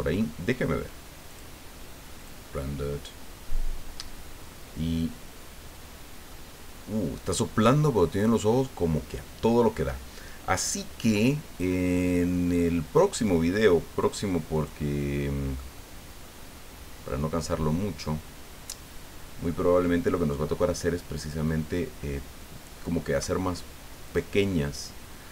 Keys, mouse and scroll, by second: 1.3 click, 2.2 click, 6.3-9.9 drag, 10.5 scroll up 1, 11.1-11.4 scroll up 1, 12.5 scroll down 1, 14.0 click, 14.5 click, 15.5-19.7 middle drag, 21.2 click, 24.1 click.